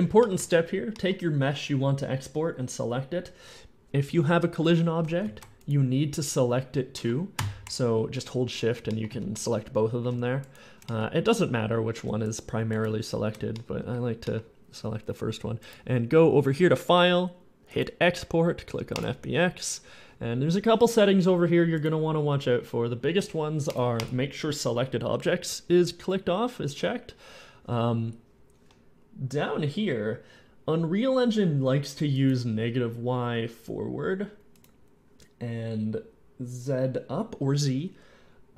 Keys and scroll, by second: 8.9 shift+z.